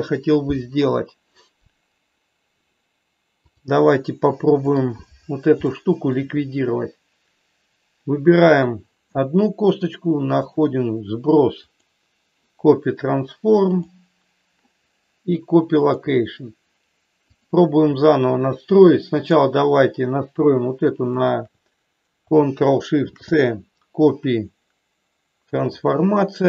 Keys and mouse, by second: 3.3-4.8 drag, 5.8 shift+middle click, 8.4 click, 10.3 click, 11.6 click, 13.7 click, 15.8 click, 17.3 click, 19.3 click, 21.1 shift+click.